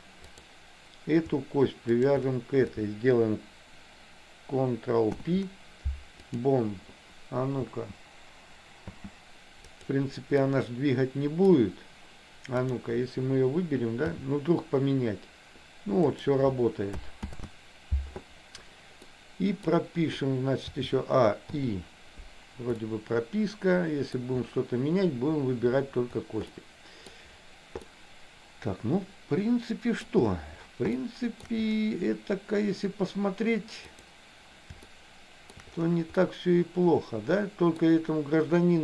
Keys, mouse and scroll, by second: 0.4 click, 2.0 shift+click, 5.1 ctrl+p, 7.8 space, 9.0 space, 9.8 click, 10.5 middle click, 12.6 click, 14.1 g, 17.4 ctrl+z, 19.1 middle click, 20.9 a, 21.6 i, 22.9-24.1 middle drag, 26.5 middle click, 27.9-30.1 middle drag, 31.1 shift+middle click, 34.0 click, 35.0 shift+middle click, 36.2-37.9 middle drag.